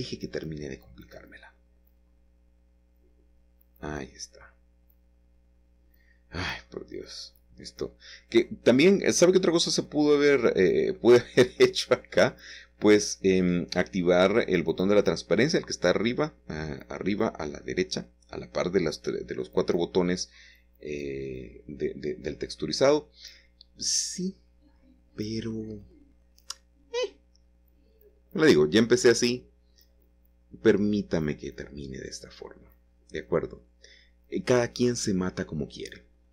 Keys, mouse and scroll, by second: 1.3 x, 2.8 c, 3.2-4.5 middle drag, 4.5 Escape, 5.0-9.3 middle drag, 9.0 x, 10.7 c, 12.5 Escape, 12.5-15.6 middle drag, 14.9 x, 16.1 typing, 16.9-20.6 middle drag, 18.0 Escape, 21.0 c, 21.5-23.9 middle drag, 22.4 Escape, 24.0-27.5 middle drag, 28.3 c, 29.1-33.2 middle drag, 30.1 Escape, 32.0 <, 35.2 c.